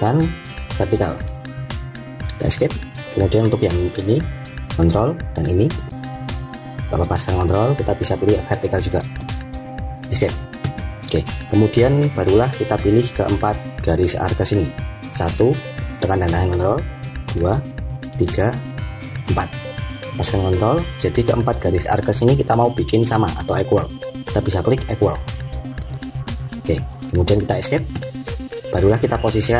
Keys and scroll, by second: 2.3 Escape, 10.0 Escape, 27.6 Escape.